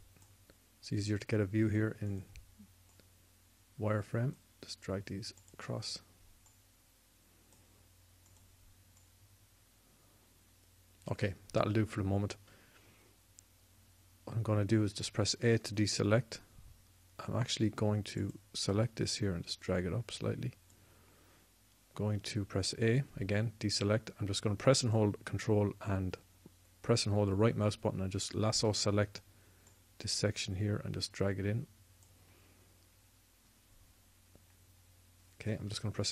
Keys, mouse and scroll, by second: 9.2-11.6 drag, 15.7 a, 23.9 a, 25.6-27.3 drag.